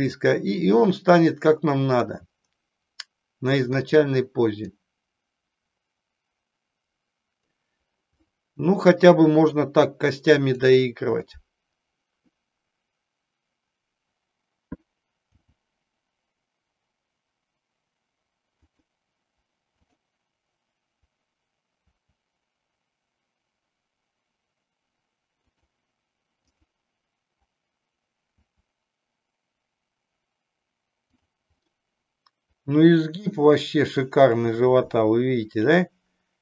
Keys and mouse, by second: 0.0 click, 1.0-2.2 middle drag, 3.8 click, 4.9-7.5 drag, 8.3-9.7 middle drag, 10.4-11.8 drag, 15.5 g, 18.8 click, 19.9-21.3 drag, 22.0 r, 26.5-27.8 drag, 28.5 r, 31.3 click, 31.7-34.2 middle drag.